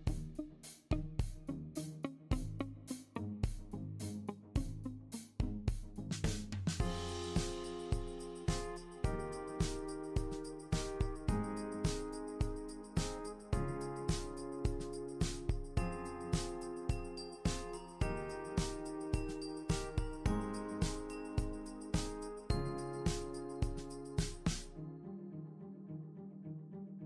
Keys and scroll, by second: 14.8 super+c, 14.9 super+v, 17.1 super+z.